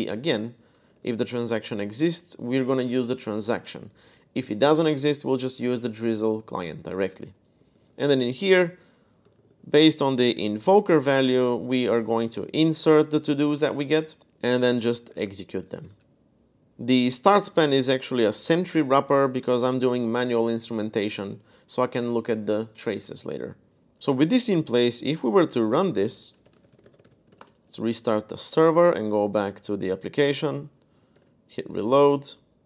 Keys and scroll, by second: 0.1 Escape, 0.6-1.4 typing, 3.9-4.6 typing, 7.4-11.6 typing, 14.1-14.9 typing, 15.6 Escape, 16.4-20.0 typing, 23.6-27.7 typing, 24.5 ctrl+b, 28.7 super+Tab, 30.9 super+r.